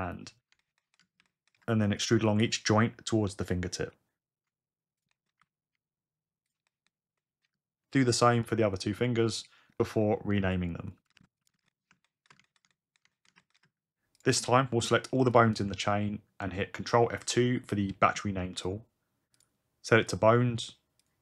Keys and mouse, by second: 0.8 shift+click, 2.3 g, 3.2 r, 3.9 e, 5.0 shift+click, 5.7 shift+e, 6.5 shift+click, 7.9-11.2 typing, 8.0 click, 8.7 click, 9.0 click, 11.0 click, 16.4 ctrl+F2.